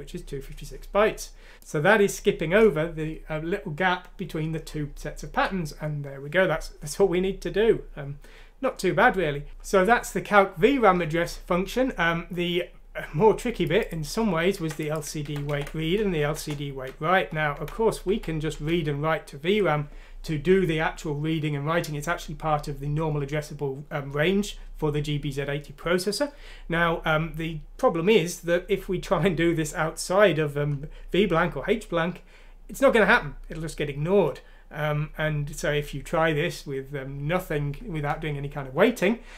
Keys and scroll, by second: 14.5 ctrl+c, 15.2 ctrl+f, 15.5 v, 16.3 Return, 17.2 F3, 17.5 Escape, 18.0 F3, 18.5 F3, 19.8-20.6 typing.